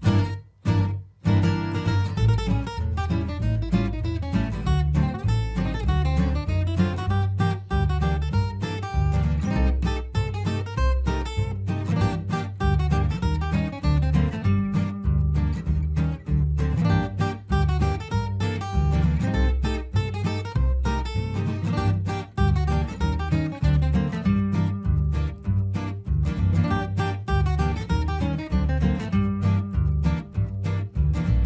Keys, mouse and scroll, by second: 0.1 p, 0.6-5.0 drag, 5.0 right click, 5.9 click, 8.7 F2, 8.8-15.2 drag, 15.2 right click, 16.9 click, 18.3 F4, 18.9-21.9 drag, 22.3 shift+Page_Down, 23.0-26.3 drag, 26.5 ctrl+r, 26.8 click, 27.8 F2, 28.0 click, 29.3 shift+Page_Up, 29.5-31.4 drag.